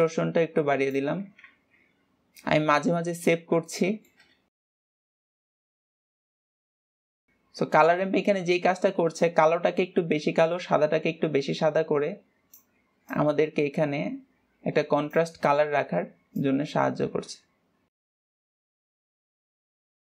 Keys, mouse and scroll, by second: 0.3-2.1 drag, 2.1 ctrl+s, 3.3-4.0 scroll up 2, 4.0 shift+middle click, 4.5-5.6 scroll up 3, 5.6-10.4 drag, 13.5-16.5 drag, 16.6-18.5 drag, 18.7-19.7 drag.